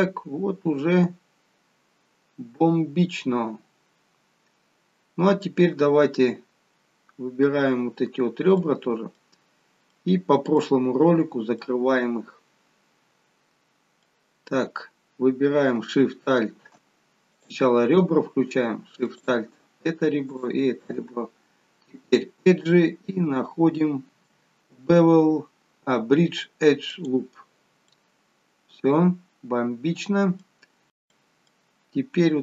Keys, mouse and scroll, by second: 8.7 middle click, 10.1 middle click, 11.7 middle click, 17.5 click, 19.2 alt+shift+click, 20.4 click, 22.2 click, 28.0 middle click, 31.7-32.4 scroll up 1.